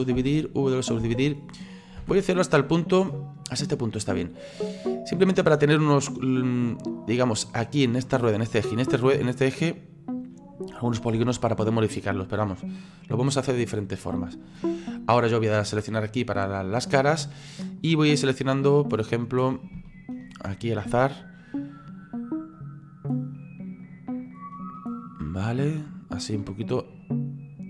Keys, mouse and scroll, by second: 0.2 w, 1.0 w, 2.0 w, 3.0 middle click, 3.7-4.4 scroll up 3, 4.4-4.9 scroll up 3, 4.9-12.5 middle drag, 12.5 scroll down 3, 16.2 click, 17.0-18.6 middle drag, 18.6 right click, 20.2 shift+right click, 20.9 shift+right click, 21.7 shift+right click, 22.6 shift+right click, 23.2 shift+right click, 23.8 shift+right click, 24.3 shift+right click, 24.8 shift+middle click, 25.5 shift+right click, 25.9 shift+right click, 26.6 shift+right click, 27.0 shift+right click.